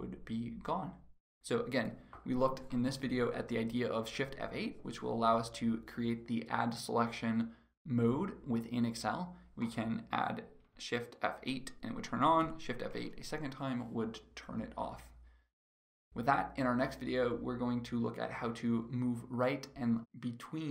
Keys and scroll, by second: 11.5 shift+F8.